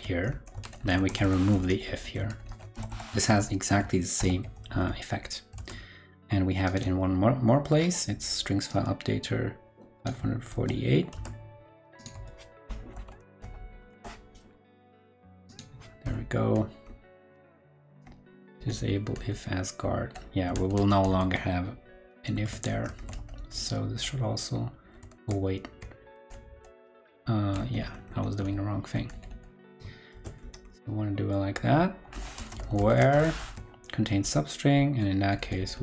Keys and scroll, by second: 0.6 shift+super+Left, 0.7 shift+super+Left, 2.2 shift+super+Left, 2.4 shift+super+Left, 4.1 super+[, 4.6 super+s, 5.5 super+Tab, 6.9 super+Tab, 10.5 super+c, 11.1 super+Tab, 12.1 super+Tab, 12.9 shift+super+o, 13.1 super+v, 22.3 super+x, 22.9 super+Right, 25.1 super+z, 30.1 super+x, 33.2 super+v.